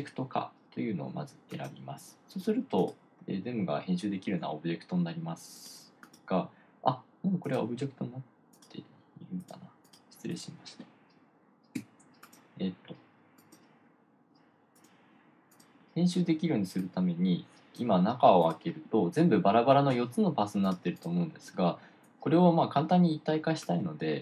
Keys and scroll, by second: 12.2 BackSpace.